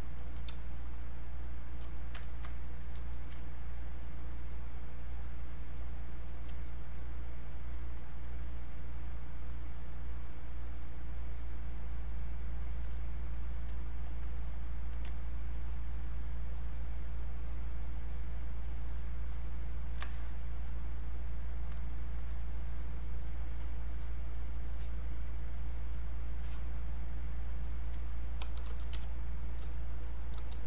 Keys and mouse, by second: 0.2 alt+click, 0.5 space, 1.0 click, 2.3 ctrl+click, 3.1 alt+click, 6.3 alt+click, 9.5-12.6 drag, 12.8 click, 15.4-23.9 ctrl+drag.